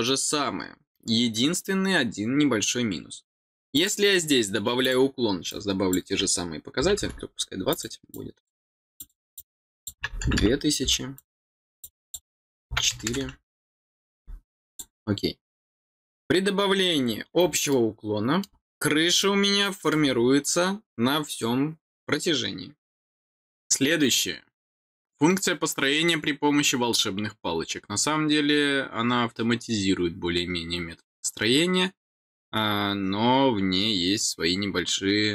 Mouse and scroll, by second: 3.7 click, 4.8 click, 5.4 click, 7.6 click, 8.1 click, 8.9 click, 9.3 click, 11.1 click, 11.7 click, 14.6 click, 17.6 middle click, 19.1 middle click, 20.1 scroll down 4, 22.6-24.5 scroll down 4, 24.5-27.1 scroll down 1, 27.1-28.5 scroll down 1, 28.5-32.5 scroll down 1, 32.5-33.8 scroll down 1, 33.8-35.3 scroll down 1.